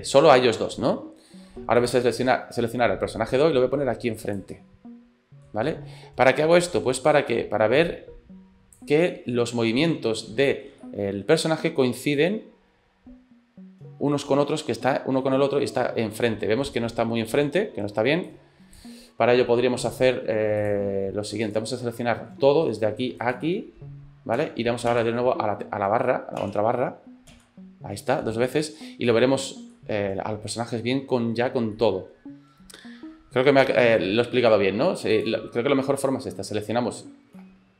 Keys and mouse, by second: 3.4-4.5 drag, 4.6 middle click, 6.6-8.9 drag, 9.0-10.6 middle drag, 10.8 shift+middle click, 12.2-17.5 drag, 18.3 click, 19.9 click, 20.6 click, 27.4 KP_Divide, 28.8 middle click, 29.7-31.4 middle drag, 31.8 middle click, 35.1 click.